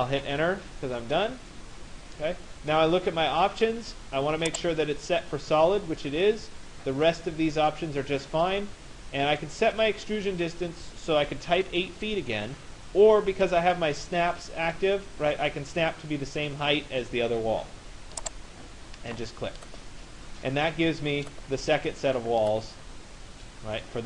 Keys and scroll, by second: 0.0 Return.